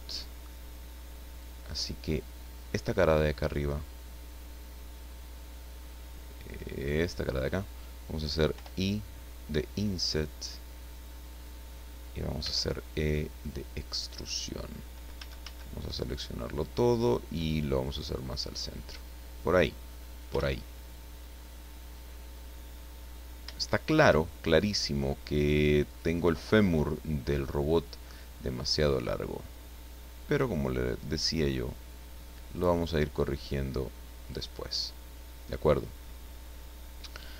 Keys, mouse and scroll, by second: 1.7 scroll up 1, 2.1 middle click, 6.6 right click, 8.6 i, 11.3 click, 12.4 e, 13.9 click, 15.2 a, 17.1-19.1 drag, 19.2-19.6 scroll down 2, 19.6 middle click, 20.6-21.1 shift+scroll down 4, 21.4 middle click, 22.4-23.0 scroll up 2, 23.2-23.6 scroll up 3, 23.6 shift+middle click, 24.6 middle click, 25.9 right click, 26.4-26.7 scroll down 2, 26.8 middle click, 29.5-32.7 drag, 33.4 click, 34.6 scroll down 1, 35.2-35.5 scroll up 1, 36.0-36.4 scroll up 1, 36.6 scroll down 1, 37.0 middle click.